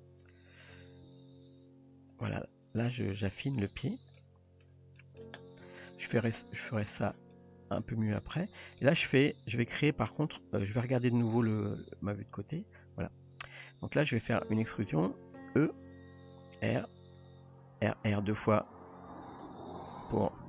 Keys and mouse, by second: 0.6 click, 1.1 s, 2.9-3.6 middle drag, 4.2-4.6 middle drag, 5.0 middle drag, 7.0 click, 7.3-7.7 middle drag, 8.1 click, 8.8-10.1 middle drag, 11.6 KP_3, 15.8 e, 16.5 r, 17.5 r, 19.2 r.